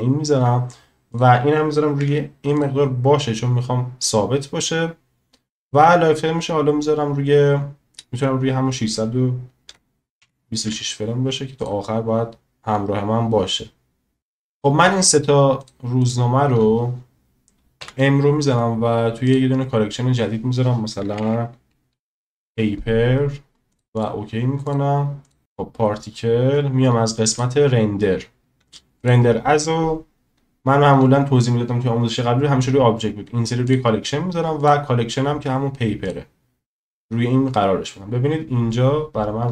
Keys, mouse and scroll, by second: 1.2-2.6 drag, 5.6-11.6 drag, 17.8 m, 24.0 click, 27.4 click, 29.0-33.8 drag, 34.6-36.1 drag.